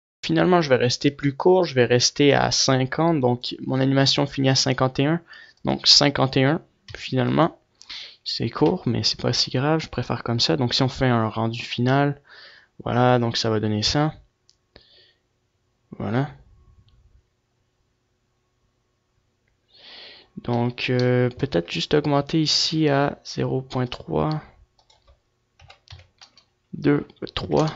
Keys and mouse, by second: 1.5-4.3 drag, 5.5-9.6 drag, 20.9 F11, 22.9-25.7 right drag, 24.2-27.7 drag.